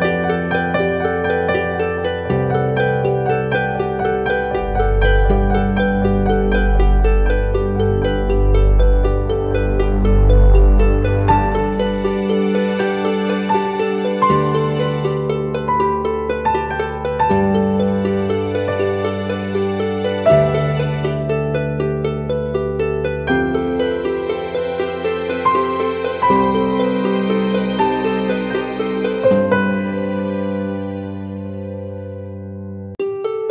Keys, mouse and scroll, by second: 1.8 double click, 3.5 ctrl+t, 4.6 alt+shift+click, 7.5 alt+shift+click, 10.6 Return, 11.5 ctrl+=, 12.9 alt+scroll down 1, 13.6 ctrl+t, 14.5 alt+shift+click, 15.7 shift+Return, 16.4 Up.